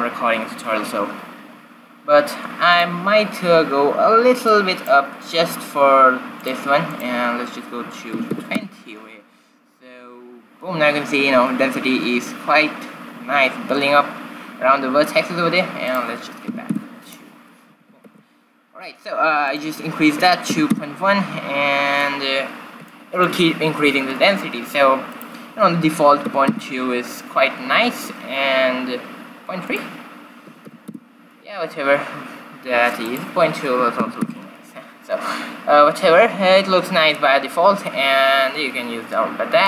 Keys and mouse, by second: 2.9-8.8 drag, 16.1-17.7 drag, 18.0 shift+z, 18.5 shift+z, 19.7-21.5 drag, 23.1-25.0 middle drag, 25.3-27.4 drag, 29.9-32.0 drag, 33.4-35.5 drag.